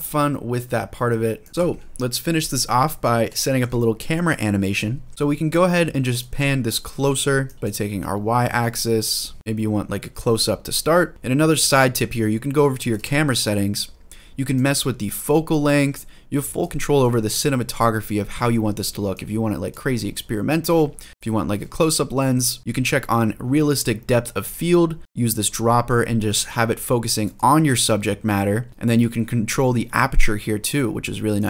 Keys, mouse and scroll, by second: 1.3 click, 1.5 shift+middle click, 2.8 scroll up 2, 3.1 shift+middle drag, 3.5 middle drag, 3.7 click, 4.5 click, 5.9 click, 6.7 ctrl+z, 7.2-9.5 drag, 7.5 ctrl+z, 12.6 click, 14.3-16.5 drag, 16.8 ctrl+z, 18.9 click, 20.4 ctrl+z, 21.1 click, 21.4 ctrl+z, 22.6-23.0 scroll down 1, 24.4 click, 25.0 click, 28.7-31.3 scroll down 1, 31.3 click.